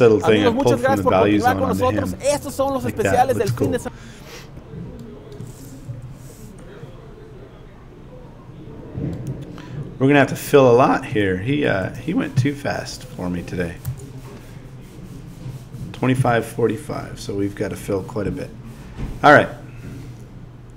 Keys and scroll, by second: 5.9 Down, 13.8 BackSpace, 16.2 Home.